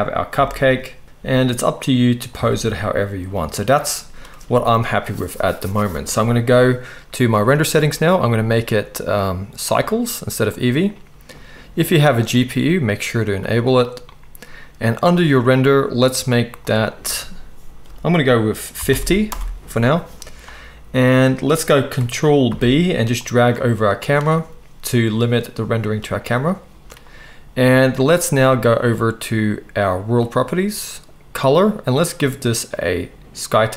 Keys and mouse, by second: 0.3 g, 1.0-7.5 middle drag, 1.2 s, 2.3 alt+a, 7.5 click, 7.7-9.6 middle drag, 9.6-30.4 drag, 22.4 ctrl+b, 30.4-31.6 middle drag, 31.6-33.7 drag.